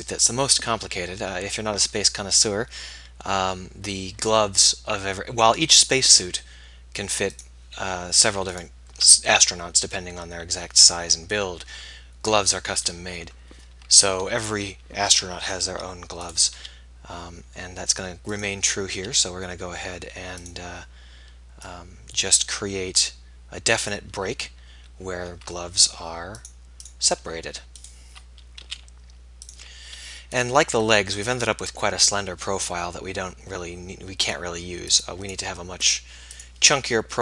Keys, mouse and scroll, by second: 0.0-1.9 typing, 15.7 e, 16.6 s, 18.9 s, 28.6 s.